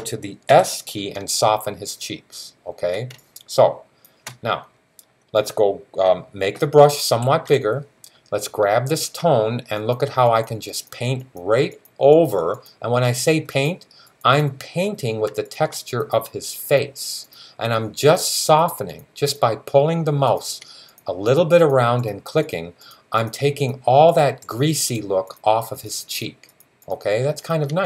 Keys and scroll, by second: 0.3 s, 6.9-7.3 typing.